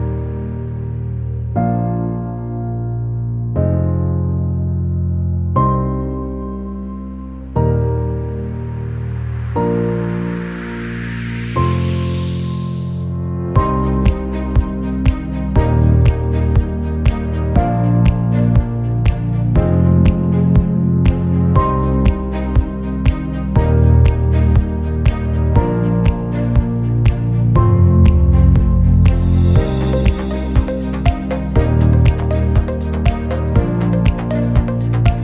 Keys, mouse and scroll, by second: 0.1 shift+d, 2.2-3.3 middle drag, 4.6-5.6 middle drag, 5.6 shift+d, 6.6 middle click, 7.4 shift+d, 9.3 r, 10.6-11.4 middle drag, 11.6 drag, 11.8 drag, 13.5 shift+d, 15.0 r, 16.1 middle click, 16.7 shift+d, 18.9 r, 19.7 shift+d, 20.9 shift+d, 22.0 shift+d, 23.4 g, 24.2 shift+d, 25.1 r, 25.9 shift+d, 27.5 shift+d, 28.5 shift+d, 29.3-30.0 middle drag, 30.0 shift+d, 31.0 shift+d, 32.0 g, 33.1 shift+d, 34.8 g.